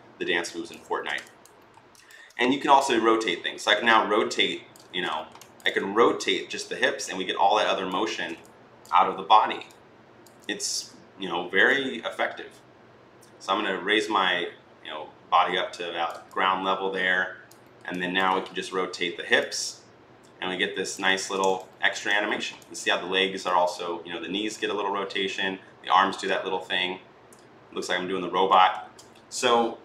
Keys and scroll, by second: 0.7 ctrl+z, 2.6 r, 4.7 ctrl+z, 7.9 ctrl+z, 8.9 e, 18.3 r, 21.0 ctrl+z, 28.6 ctrl+z.